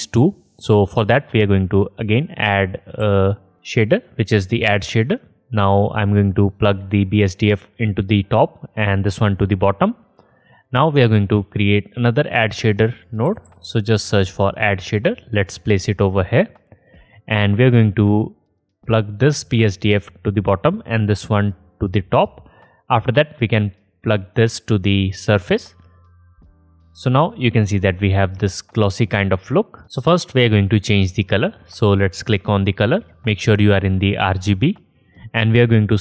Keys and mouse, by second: 1.1 shift+a, 6.1-10.6 drag, 11.1 shift+a, 13.4 d, 16.3-21.4 drag, 21.7 drag, 21.9-28.2 middle drag.